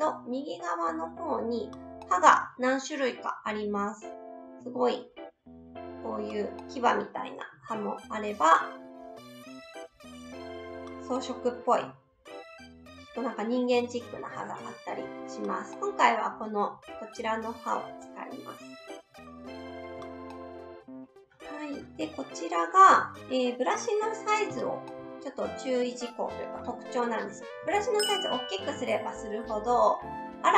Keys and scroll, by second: 7.6 ctrl+z, 14.4 ctrl+z, 24.5 s.